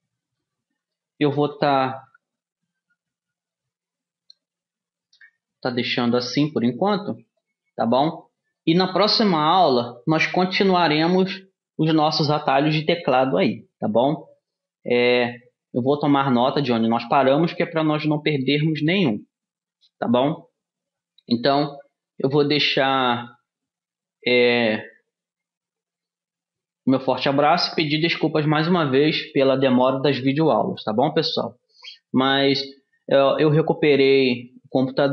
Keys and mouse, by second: 1.2 space, 2.0 KP_3, 2.6 d, 5.6 Tab, 7.4-8.6 drag, 9.0 click, 9.1-13.4 drag.